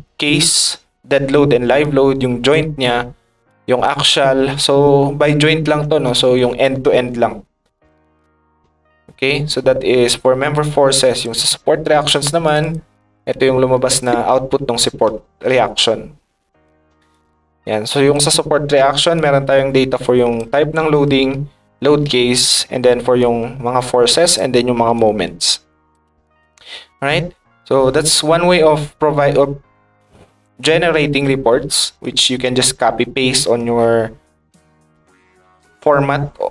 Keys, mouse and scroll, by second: 1.8 ctrl+click, 2.3 ctrl+right click, 3.4 ctrl+click, 3.4 ctrl+right click, 11.1 click, 12.4 click, 12.6 click, 17.1-18.1 ctrl+drag, 19.1-20.3 ctrl+drag, 23.2-24.3 ctrl+drag, 24.9 ctrl+click, 27.4-28.9 middle drag, 31.6 middle click, 32.1 middle click, 33.7 middle click.